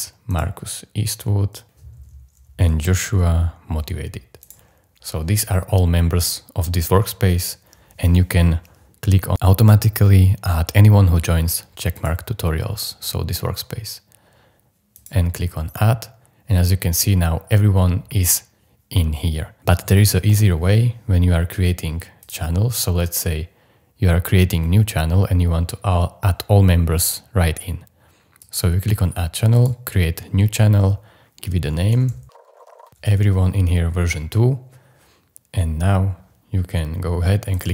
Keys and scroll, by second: 2.5-3.4 typing, 31.8-33.5 typing.